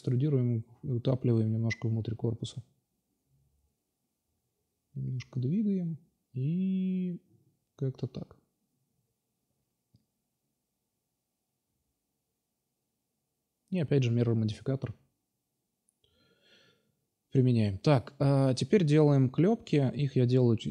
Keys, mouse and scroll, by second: 1.8 k, 2.4 l, 5.6 click, 6.1 Tab, 7.4-8.1 middle drag, 8.7 click, 9.6 ctrl+a, 11.1 click, 12.7-13.5 drag, 12.7 shift+a, 13.5 shift+a, 14.1 shift+a, 15.9-16.5 drag, 17.2 click, 18.2-20.1 drag, 20.1 Tab.